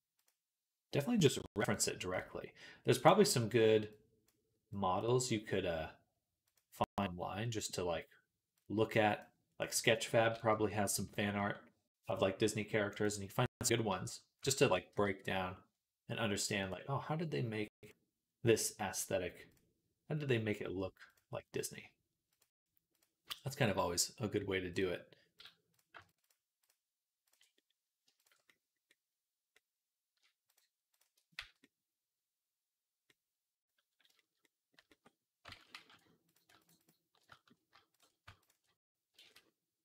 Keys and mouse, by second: 1.6 middle click, 2.0-4.2 drag, 4.2 middle click, 4.5 click, 4.8-6.3 middle drag, 6.3-25.3 drag, 10.4 Tab, 11.2 Tab, 14.4 ctrl+a, 23.1 Tab, 25.3 middle click, 25.9 alt+shift+click, 26.1 alt+shift+middle click, 26.5 alt+shift+click, 27.2 middle click, 28.0 alt+shift+click, 28.1-36.1 shift+middle drag, 31.2 z, 35.4 ctrl+z, 35.6 ctrl+z, 36.1 click, 36.4 alt+shift+middle click, 36.5 alt+shift+click, 37.0 alt+shift+middle click, 37.8 click, 37.9-39.8 ctrl+middle drag, 39.0 ctrl+z.